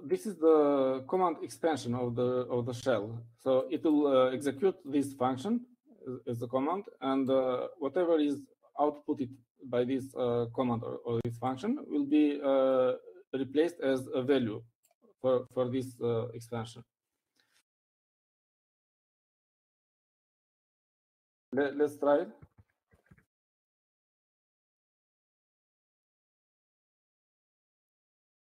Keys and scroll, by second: 20.5-21.7 typing, 23.6-25.2 typing.